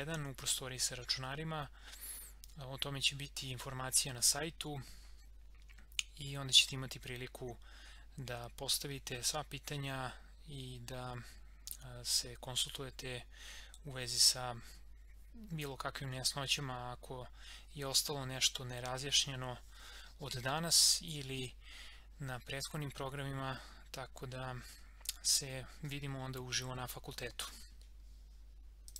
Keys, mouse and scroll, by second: 28.9 click.